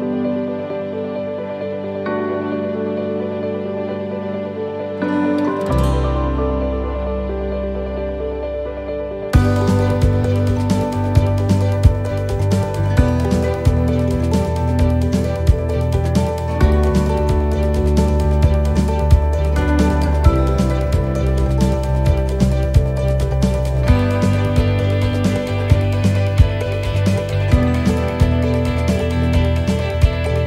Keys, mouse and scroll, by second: 0.3 click, 0.6 middle click, 1.1-1.9 scroll up 1, 2.7 right click, 3.4 alt+shift+right click, 5.2 alt+shift+right click, 7.5 alt+shift+right click, 8.9 alt+shift+right click, 9.4 middle click, 11.5 alt+shift+right click, 12.3 alt+shift+right click, 15.0 alt+shift+right click, 16.2 ctrl+z, 17.7 ctrl+z, 18.3 alt+shift+right click, 19.9 alt+shift+right click, 20.7 middle click, 22.4 middle click, 22.6 scroll up 1, 23.2-23.6 scroll up 3, 23.6 alt+shift+right click, 24.6 alt+shift+right click, 24.6 shift+middle click, 24.8 shift+middle click, 25.8 alt+shift+right click, 26.8 scroll down 3, 27.2 middle click, 28.4 scroll down 1, 28.9 middle click, 29.5-29.9 scroll up 1, 30.2 scroll up 1.